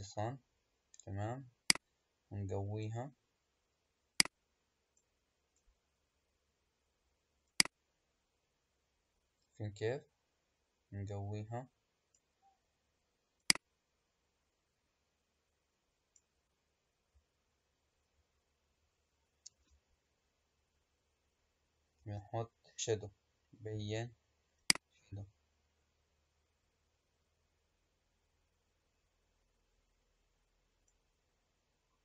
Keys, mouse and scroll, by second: 1.6-7.2 drag, 7.4-10.5 drag, 13.3-16.4 drag, 19.6 space, 22.0 space, 24.5-27.6 drag.